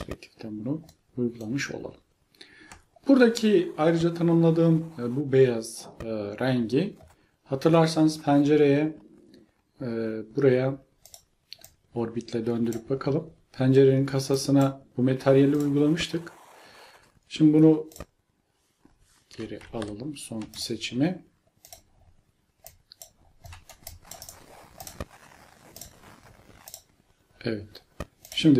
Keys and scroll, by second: 19.7 ctrl+z.